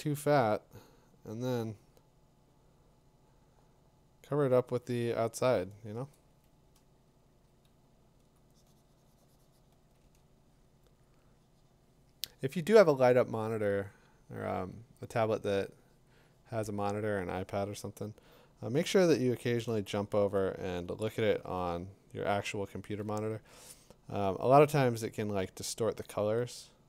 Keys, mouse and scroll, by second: 0.8 click, 4.8 click, 8.4 click, 10.8 click, 11.0 click, 12.7 click, 14.7 click, 19.6 click, 20.0-21.3 typing, 22.8 [, 23.0 [, 23.3 [.